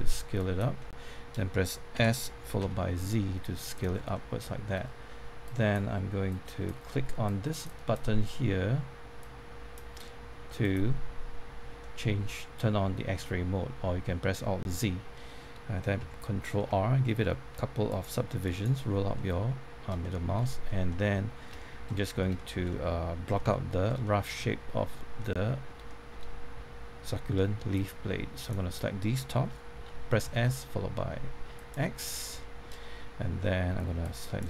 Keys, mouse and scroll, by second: 0.9 middle click, 1.9-2.9 typing, 3.9 scroll down 1, 4.1 middle click, 5.4 click, 11.7-12.9 middle drag, 14.8-15.1 scroll up 1, 15.1 middle click, 16.9 ctrl+r, 16.9-17.9 scroll up 1, 17.9 click, 18.4 right click, 19.4 middle click, 20.0 shift+middle click, 21.6 shift+middle click, 22.3 shift+middle click, 23.5 shift+middle click, 27.7-28.9 drag, 29.5-30.7 typing, 31.5 click, 31.9 middle click, 33.3 middle click, 34.0 click.